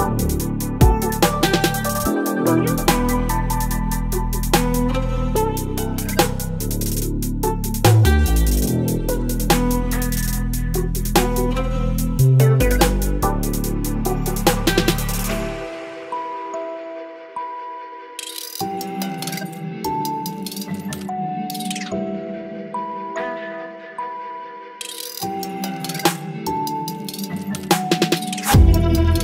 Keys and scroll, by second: 1.0 ctrl+BackSpace, 1.3 ctrl+d, 2.0 space, 4.1 Delete, 5.3 Delete, 5.8 space, 6.1 v, 6.2 ctrl+t, 9.1 Return, 9.3 space, 11.8 ctrl+BackSpace, 12.5 space, 12.9 v, 13.1 ctrl+t, 13.7 Return, 14.0 space, 15.3 Delete, 15.5 v, 15.9 ctrl+j, 16.0 ctrl+t, 19.4 Return, 20.3 Delete, 20.4 space, 21.0 space, 22.8 ctrl+BackSpace, 24.5 ctrl+BackSpace, 24.9 space, 25.3 space, 25.8 v, 27.0 Return, 27.4 Left, 27.4 Left, 27.5 Left, 27.5 Left, 29.1 Delete.